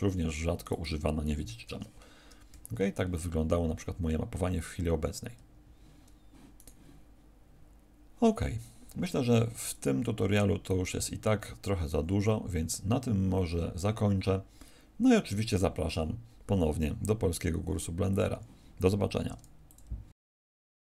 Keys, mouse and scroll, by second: 0.5 right click, 1.4 alt+r, 5.3 Escape, 6.5 right click, 9.5 click, 18.0 click.